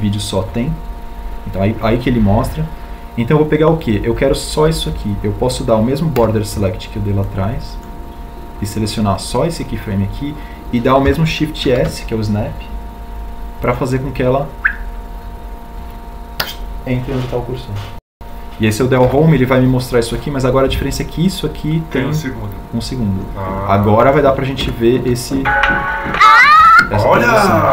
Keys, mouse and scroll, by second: 0.1 ctrl+click, 3.4 ctrl+click, 9.2 b, 13.3 shift+s, 20.8 Home.